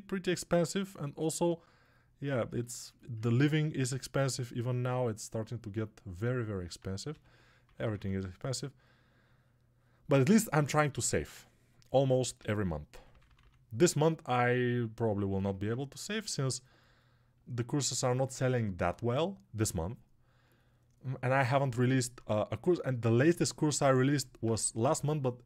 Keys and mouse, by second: 2.4-4.1 ctrl+alt+right drag, 4.1-25.4 ctrl+alt+drag.